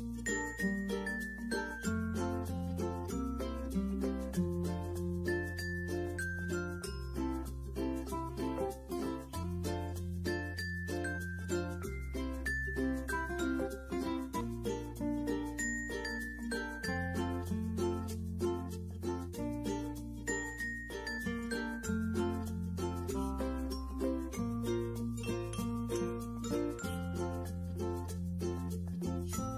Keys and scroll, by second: 11.5 ctrl+0, 15.2 alt+space, 21.1 f, 22.5 space.